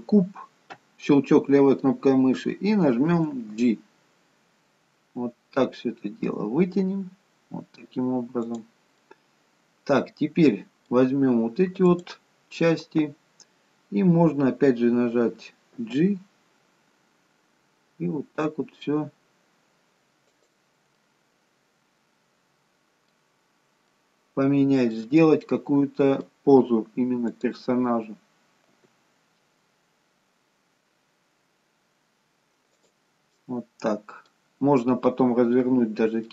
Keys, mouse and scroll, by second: 9.0 middle click, 12.0 click, 15.8 g, 20.9 middle click, 23.9 middle click, 25.4 middle click, 27.3 click, 28.8 g, 33.4 middle click.